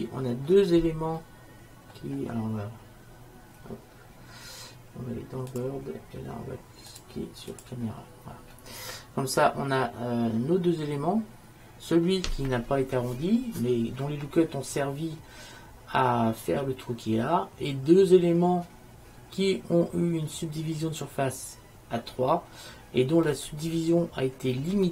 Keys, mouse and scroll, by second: 1.2 middle click, 2.0-3.1 middle drag, 3.7-5.6 middle drag, 5.6-9.6 drag, 8.8 middle click, 9.6-10.6 middle drag.